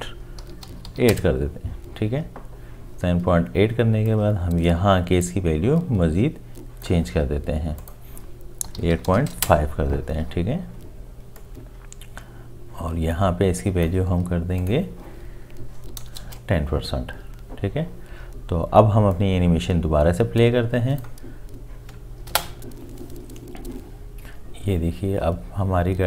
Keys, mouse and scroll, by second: 0.4 7, 0.9 8, 0.9 ., 1.1 Return, 8.7 8, 8.9 5, 8.9 ., 9.3 Return, 15.9 1, 16.2 Return, 16.2 0, 22.3 space.